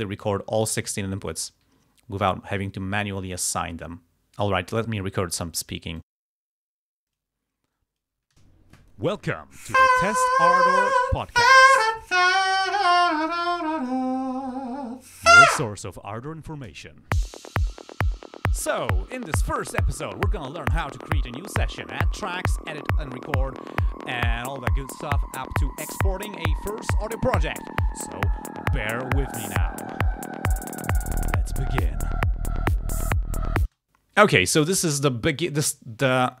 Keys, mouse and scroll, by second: 6.1 click, 7.2 click, 7.8 click, 8.4 shift+space, 33.8 space, 33.9 click.